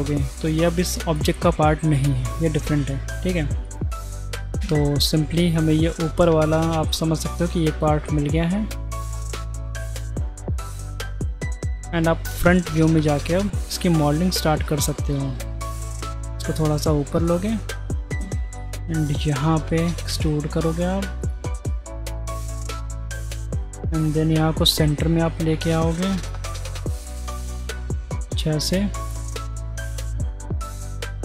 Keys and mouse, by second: 0.5 Tab, 1.8 click, 2.3-3.4 middle drag, 3.7 middle click, 4.6 Tab, 9.2-10.2 middle drag, 11.9 1, 13.0 click, 14.2 z, 14.9 click, 15.5 g, 19.9 e, 21.8 click, 23.7 e, 26.6 e, 27.7 e.